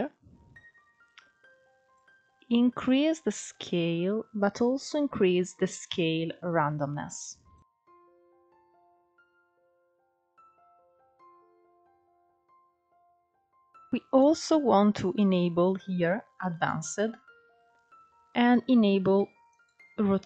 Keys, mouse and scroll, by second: 0.6-3.5 drag, 4.2-6.2 drag, 6.2 scroll down 3, 6.4-8.9 middle drag, 8.9-9.5 scroll up 4, 9.5 scroll down 1, 9.6-11.4 middle drag, 11.4-13.0 scroll up 3, 13.0-13.8 scroll down 1, 13.8-14.9 scroll up 2, 14.9 click, 17.9 click, 18.6 click, 19.6-20.1 scroll down 1, 20.1-20.2 scroll down 3.